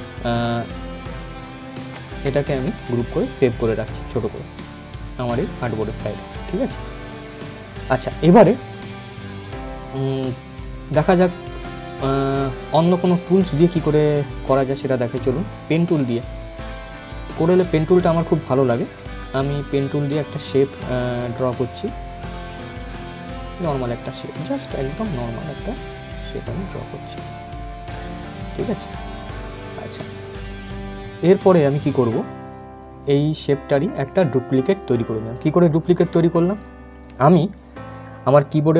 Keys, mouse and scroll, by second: 0.5-2.1 shift+drag, 2.1 ctrl+z, 2.9 click, 3.0-8.2 shift+drag, 10.4-13.7 drag, 13.7-19.0 drag, 21.1-33.9 drag, 33.9-35.5 right drag, 35.5 ctrl+z.